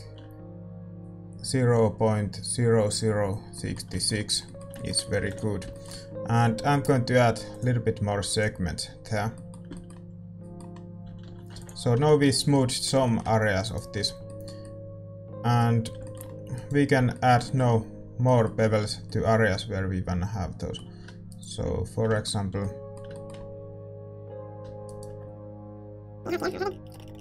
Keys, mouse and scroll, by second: 3.5-8.4 middle drag, 5.7 ctrl+s, 7.6-11.0 drag, 8.9-16.5 middle drag, 11.0 a, 11.2 a, 11.7 ctrl+s, 13.6 right click, 14.5 click, 16.5-18.2 drag, 16.5-18.2 right drag, 17.0 Tab, 18.2-21.2 middle drag, 21.2-23.1 right drag, 22.1-23.1 drag, 22.5 a, 24.8-26.4 right drag.